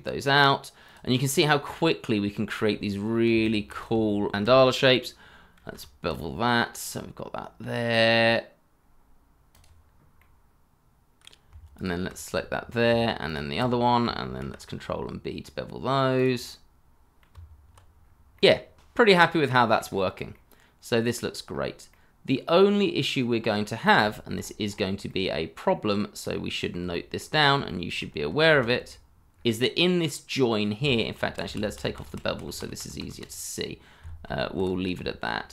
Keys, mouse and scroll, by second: 1.1 middle click, 2.4-3.3 scroll up 1, 3.4 alt+click, 3.9 Tab, 5.6 ctrl+b, 6.6 scroll up 1, 8.9 scroll up 1, 9.8 middle click, 10.2 alt+click, 10.5 middle click, 11.7 alt+click, 12.2 middle click, 13.2 alt+shift+click, 13.8 middle click, 14.4 ctrl+b, 16.4 middle click, 17.3 Tab, 18.0 scroll down 1, 18.2 middle click, 19.3 shift+middle click, 19.5 scroll up 1, 19.9 middle click, 20.9 scroll up 1, 21.2 middle click, 22.6 scroll down 1, 23.0 shift+middle click, 23.3 scroll up 1, 23.8 middle click, 25.4 shift+middle click, 25.7 shift+scroll up 2, 26.0 shift+middle click, 26.3 scroll up 1, 26.7 shift+z, 27.0 middle click, 27.8 shift+middle click, 28.5 shift+middle click, 28.9 scroll down 1, 29.3 middle click, 29.7 shift+middle click, 29.9 shift+scroll, 30.1 middle click, 30.6 shift+middle click, 30.9 shift+scroll up 2, 31.2 scroll down 1, 31.7 middle click, 32.6 ctrl+z, 34.8 ctrl+shift+z, 35.2 Tab.